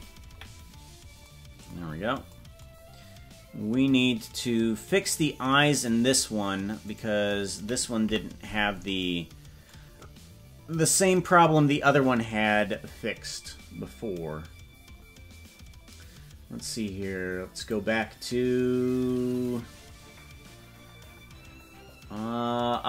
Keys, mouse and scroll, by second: 0.3 KP_Decimal, 1.9 scroll down 2, 2.5 scroll down 4, 3.8-4.1 scroll up 4, 6.9 right click, 8.0 KP_Decimal, 11.7-17.7 right drag, 17.7 click, 18.9 scroll down 1, 22.8 scroll down 6.